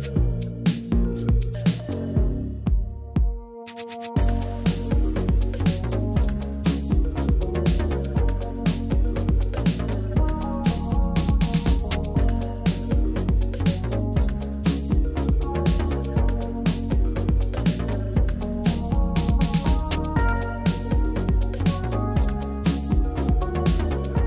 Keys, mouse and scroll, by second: 1.3-2.0 shift+drag, 2.1-2.4 middle drag, 3.6 middle click, 4.3 shift+drag, 4.5 middle click, 6.4-7.3 shift+drag, 7.5 middle click, 9.0 shift+click, 9.3 shift+click, 10.4 shift+click, 11.4-11.7 shift+drag, 11.8-12.2 middle drag, 13.3 e, 14.1 Escape, 14.7 ctrl+z, 15.1 s, 17.6 click, 18.2 s, 18.4 z, 19.8 click, 20.4 a, 21.0 shift+e, 21.7 Escape, 22.5 Tab, 23.0 middle click.